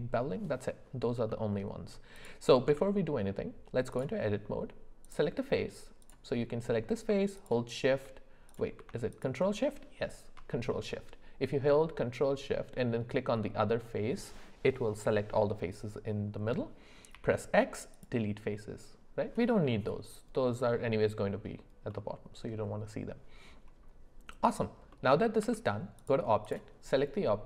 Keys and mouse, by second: 1.3 middle click, 2.1 click, 2.6 Tab, 6.0 click, 7.4 shift+click, 8.5 click, 9.1 ctrl+shift+click, 17.1 x, 21.9-23.1 middle drag, 24.9 middle click, 25.4 Tab, 26.4 click.